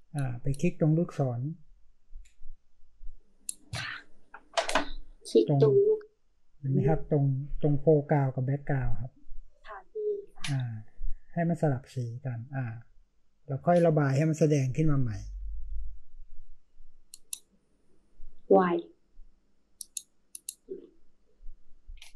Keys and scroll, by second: 15.0 ], 15.2 ], 15.4 ], 15.6 ], 21.1 typing.